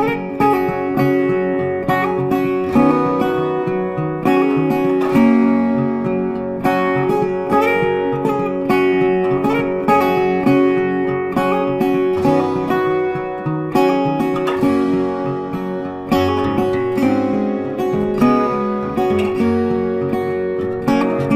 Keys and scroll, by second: 3.9 ctrl+z, 6.0 ctrl+z, 11.2 ctrl+z, 17.4 ctrl+z, 18.5 ctrl+x, 19.0 ctrl+z, 19.8 ctrl+f, 21.2 BackSpace.